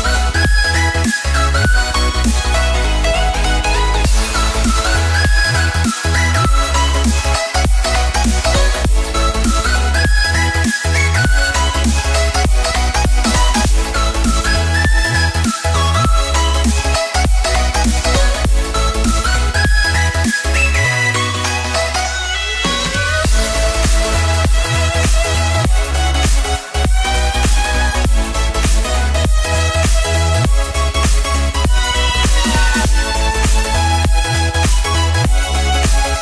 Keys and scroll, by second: 10.1 ctrl+=, 10.2 ctrl+=, 10.3 ctrl+=, 11.8 Delete, 12.4 Delete, 14.2 ctrl+z, 14.6 ctrl+z, 24.7 ctrl+-.